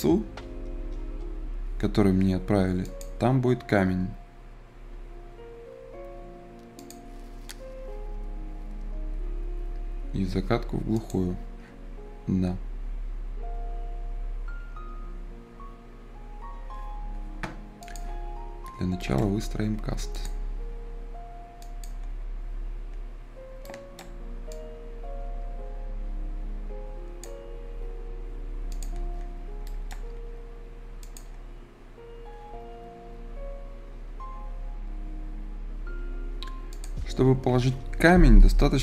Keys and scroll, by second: 3.0 Escape.